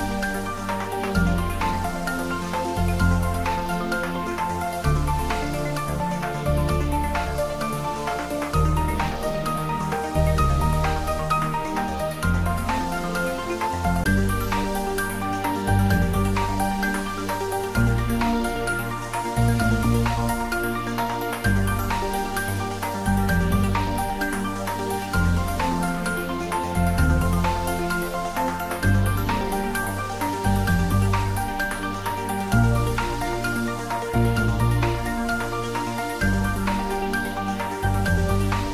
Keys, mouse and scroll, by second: 3.3-13.4 drag, 13.4-14.2 scroll down 1, 15.0-17.7 middle drag, 17.7 shift+click, 24.6 click, 26.9 click, 27.9 scroll down 1, 33.7 scroll up 1, 37.4 scroll up 1, 37.6 ctrl+z.